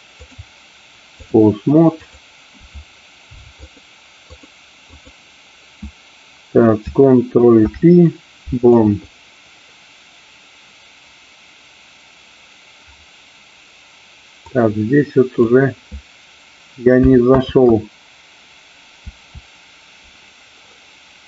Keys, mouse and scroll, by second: 0.3-1.4 drag, 2.1 click, 4.3 click, 4.9 click, 7.5 ctrl+p, 14.5-15.5 drag, 18.5 ctrl+z.